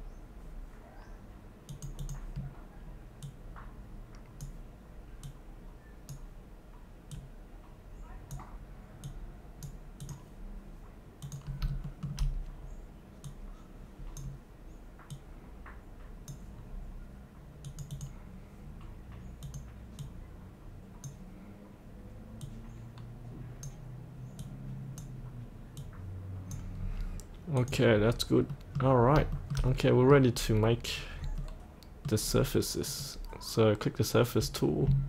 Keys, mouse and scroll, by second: 11.9 shift+middle click, 13.3-26.8 drag, 26.8-27.6 scroll up 1, 27.6 click, 28.0-28.5 scroll up 1, 28.5 middle click, 29.0 scroll up 1, 29.4 shift+middle click, 30.4-31.0 scroll down 1, 31.0-31.4 scroll up 1, 31.5 middle click, 32.2-32.9 scroll down 1, 32.9 click.